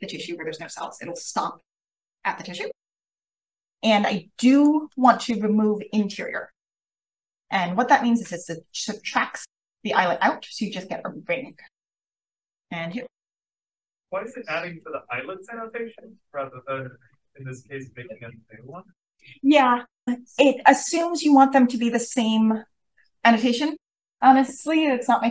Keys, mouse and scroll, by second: 4.5 click, 4.8 click, 12.8 click.